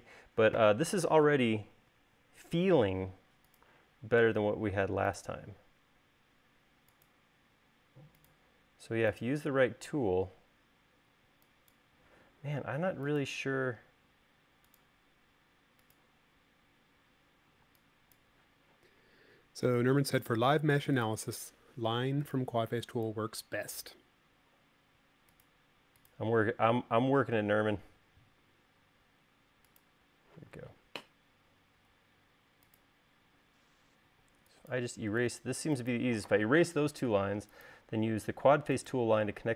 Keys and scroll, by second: 11.5 e, 17.9 e, 34.5 e.